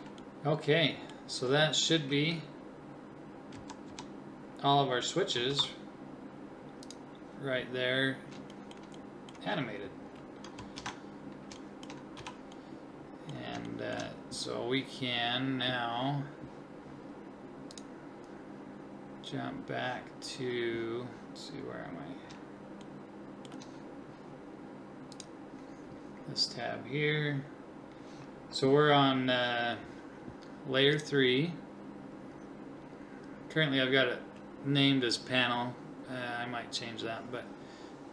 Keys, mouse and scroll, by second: 2.1 Right, 3.5 Left, 3.9 Left, 5.5 ctrl+s, 10.8 alt+h, 12.2 a.